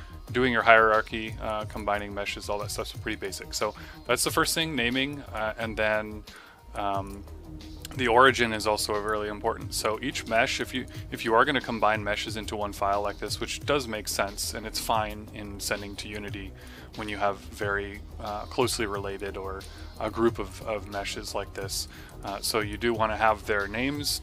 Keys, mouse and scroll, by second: 1.2 click, 1.9 click, 3.1 click, 5.0 click, 7.0 click, 7.8 click, 8.3 right click, 9.6 middle click, 10.0 right click, 10.2 click, 10.6 right click, 10.9 click, 12.2 click, 15.9 right click, 16.2 middle click, 16.6 click, 19.1 click, 19.7 right click, 20.0 click, 21.0 click, 21.8 right click, 22.1 click, 22.3 typing.